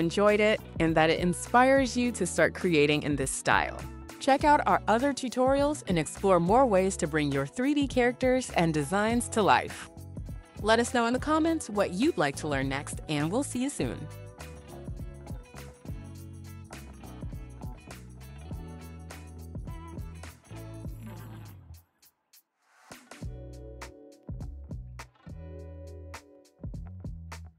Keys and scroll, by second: 0.0-0.3 typing.